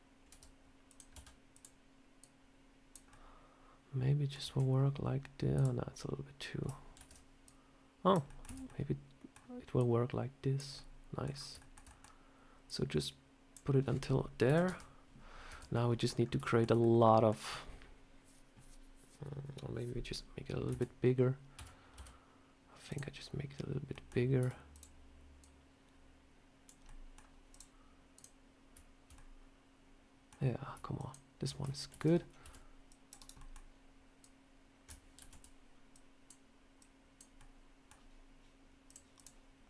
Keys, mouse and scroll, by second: 0.2 r, 1.0 s, 2.1 click, 3.0 middle click, 4.3 Tab, 5.4 click, 6.4 scroll up 1, 6.8 ctrl+z, 7.3 click, 8.2 middle click, 8.3 Tab, 8.5 middle click, 9.6 click, 10.6 scroll up 1, 10.6 middle click, 11.2-11.6 scroll down 2, 11.5 shift+middle click, 11.8 middle click, 12.5 click, 14.3 KP_7, 14.5 Tab, 15.4 Tab, 15.6 middle click, 16.0 scroll down 2, 16.3 shift+middle click, 16.7 middle click, 20.5 Tab, 21.4 a, 21.8 s, 23.8 middle click, 24.2 s, 25.3 click, 26.7 middle click, 27.4 click, 28.0 click, 29.0 middle click, 30.8 shift+click, 31.0 shift+click, 31.8 ctrl+z, 32.3 c, 33.2 middle click, 34.1 click, 35.0 ctrl+z, 35.8 click, 36.6 click, 37.2 middle click, 38.7 click, 39.0 click.